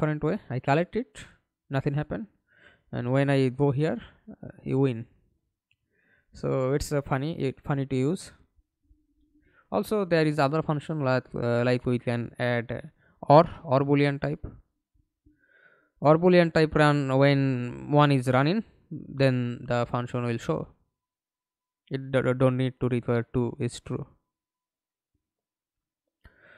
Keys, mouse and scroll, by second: 2.1-4.1 typing, 5.3 s, 5.8 d, 6.6 Escape, 6.9 middle click, 7.7 F11, 12.7 Delete, 15.1 typing, 16.1 Return, 22.6 double click, 24.8 middle click, 25.6 F11, 26.1 alt+p.